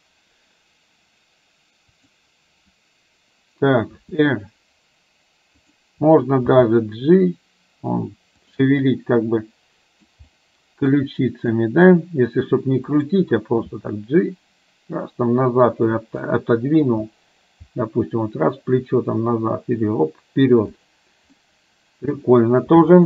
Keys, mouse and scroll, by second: 2.1 click, 4.1 r, 6.6 g, 8.9-10.1 middle drag, 10.4 middle click, 11.7 middle click, 11.8 scroll down 1, 13.1 click, 13.8 g, 16.3 middle click, 17.7 g, 21.6-22.3 middle drag.